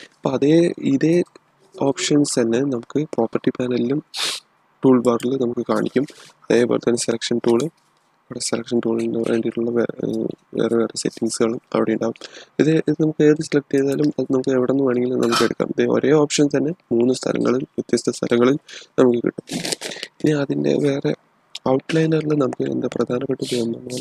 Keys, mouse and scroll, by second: 5.0 click, 6.8 typing, 13.7 click.